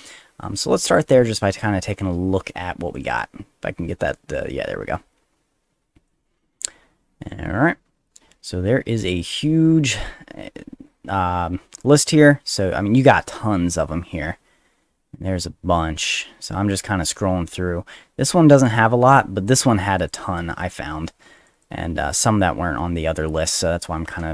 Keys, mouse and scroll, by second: 1.3 ctrl+click, 2.9 click, 3.1 click, 6.1-7.3 drag, 9.0 middle click, 12.8 middle click, 13.6 middle click, 13.8 middle click, 14.1 middle click, 15.3 middle click, 15.8 middle click, 16.3 middle click, 16.5 middle click, 17.1 middle click, 18.6 click, 19.5 ctrl+click, 20.0 ctrl+click, 21.4 ctrl+click, 21.5 ctrl+click.